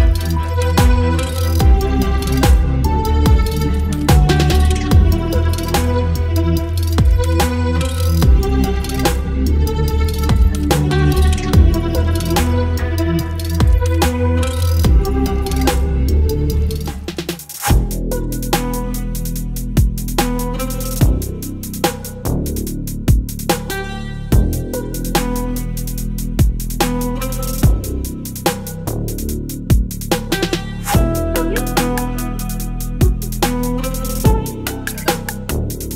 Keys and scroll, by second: 1.7 space, 2.0 ctrl+e, 7.8 Return, 10.4 ctrl+t, 12.6 Return, 21.1 Return, 28.4 space.